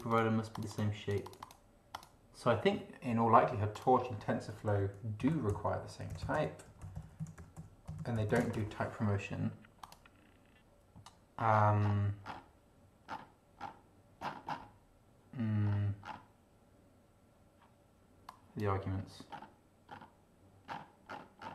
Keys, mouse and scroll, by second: 0.5 click, 1.1 click, 1.9 click, 3.7 click, 4.3-8.8 typing, 9.8 click, 11.5 scroll down 1, 12.2 scroll down 1, 13.1-13.4 scroll down 1, 13.6 scroll down 1, 14.2-14.7 scroll up 1, 15.6 scroll up 2, 16.0-16.3 scroll down 1, 18.3 click, 19.3 scroll up 2, 19.9-20.2 scroll up 2, 20.7-21.3 scroll down 3.